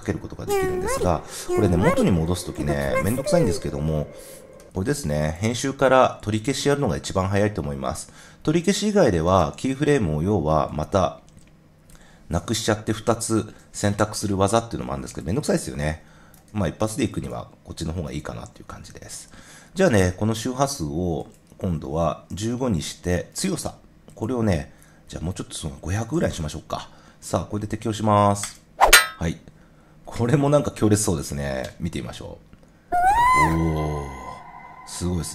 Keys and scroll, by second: 13.4 BackSpace, 16.4 super+z, 22.2 i, 22.9 5, 25.6-26.6 typing, 31.6 0.